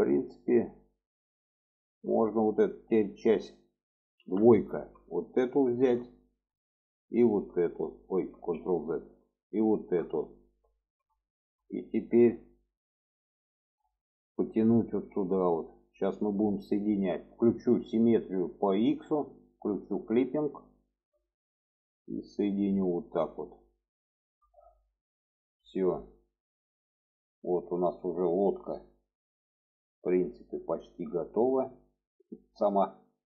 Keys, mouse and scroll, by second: 0.1 shift+middle click, 0.8 middle click, 2.4 middle click, 4.0 2, 4.2 middle click, 5.3 alt+shift+click, 5.8 middle click, 6.9 alt+shift+click, 8.1 ctrl+z, 9.4 alt+shift+click, 9.9 middle click, 11.1-12.1 alt+middle drag, 12.9 shift+middle click, 14.3-16.6 drag, 18.9 click, 20.0 drag, 20.6 shift+middle click, 21.8-22.9 drag, 23.9 shift+middle click, 24.3 middle click, 25.7 middle click, 26.5 middle click, 27.5-30.0 middle drag, 32.5 middle click.